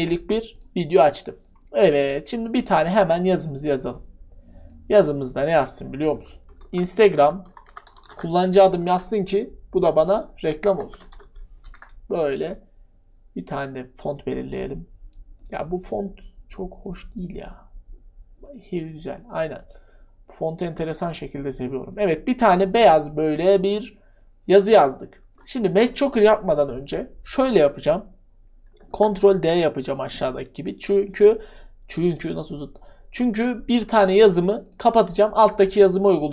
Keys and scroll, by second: 6.6 ctrl+alt+q, 6.8-9.3 typing, 10.4-12.1 typing, 28.9 ctrl+d.